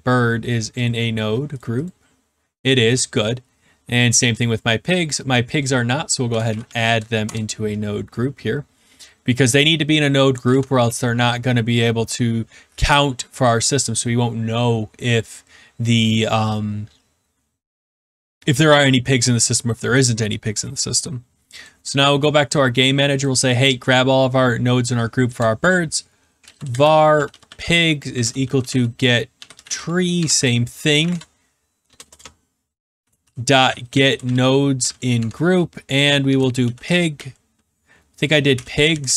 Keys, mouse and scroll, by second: 0.8 click, 1.5 click, 4.3 click, 5.6 click, 6.0-7.2 typing, 10.4 ctrl+s, 21.7 click, 23.2 click, 25.2 Return, 26.1-39.1 typing.